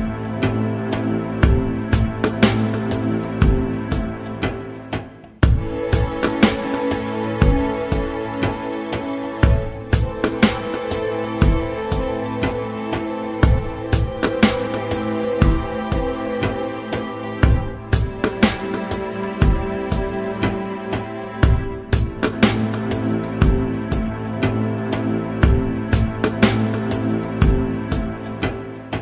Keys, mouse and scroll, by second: 2.6 Down, 3.4 Down, 7.2 Up, 9.1 Up, 10.7 Tab, 16.2 Tab, 17.1 Return, 19.9 Tab, 21.1 Return, 23.5 scroll up 2, 25.4 click, 27.0-29.0 typing.